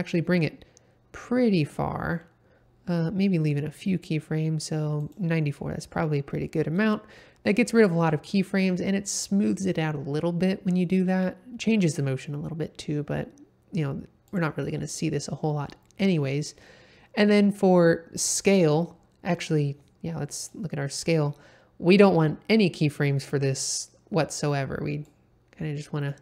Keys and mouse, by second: 4.9 click, 14.3 click, 20.4-20.9 drag, 25.0-26.2 drag.